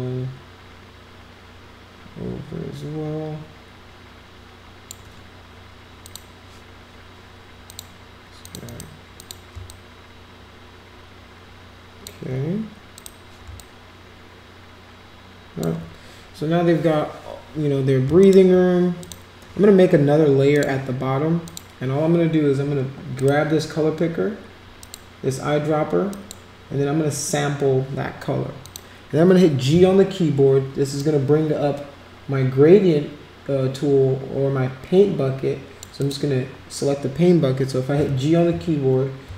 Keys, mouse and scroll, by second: 6.0 click, 7.7 click, 8.4 click, 8.6 click, 9.2 click, 9.7-12.0 shift+drag, 13.0 click, 13.6 shift+click, 18.2 shift+click, 19.0 click, 20.5 click, 21.4 click, 23.1 click, 24.8 click, 26.1 click, 28.6 click, 31.0-35.8 drag, 36.0 click, 38.5 g, 39.3 g.